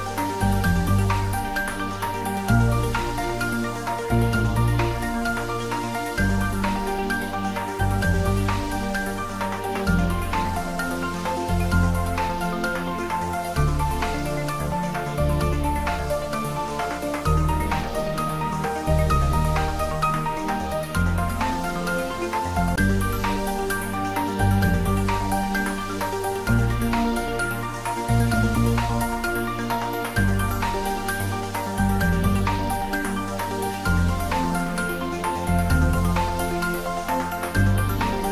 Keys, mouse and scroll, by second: 1.1 click, 4.3 click, 11.8 click, 12.1 ctrl+s, 17.2-18.8 scroll down 1, 18.8-19.2 scroll up 1, 21.3 click, 24.9 click, 29.4 click, 30.2 ctrl+s, 34.4 ctrl+s, 36.6 click.